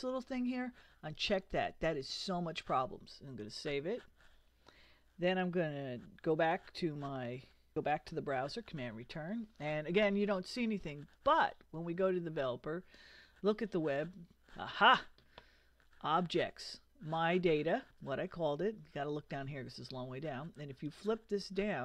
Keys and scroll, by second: 6.3 super+Tab, 8.1 super+Return.